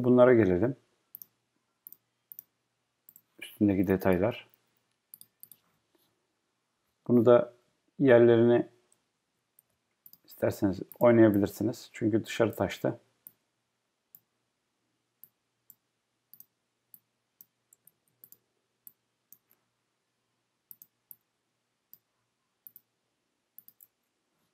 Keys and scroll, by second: 7.6 Down, 10.3 Up.